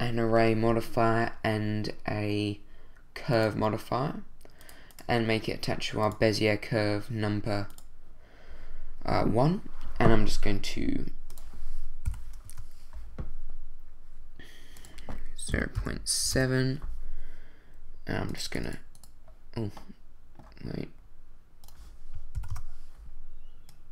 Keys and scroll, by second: 12.1 0, 12.4 Return, 15.5 0, 15.7 ., 16.2 7, 16.3 Return, 22.3 0, 22.5 Return.